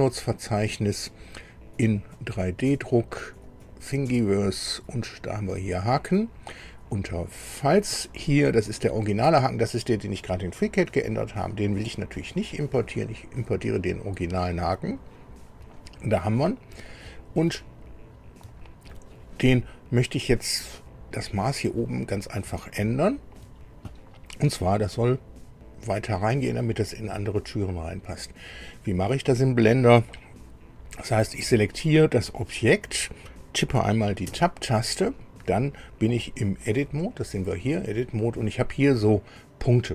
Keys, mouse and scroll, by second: 2.0 click, 3.4 click, 5.2 click, 7.2 click, 8.6 click, 21.1 scroll up 1, 22.6 shift+click, 31.3 click, 34.2 Tab.